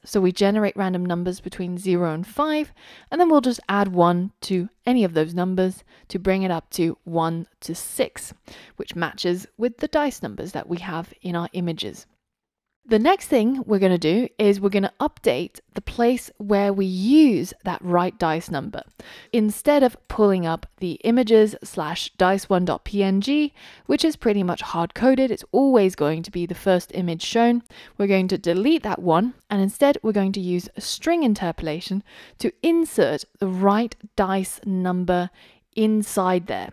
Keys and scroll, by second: 34.9 Return.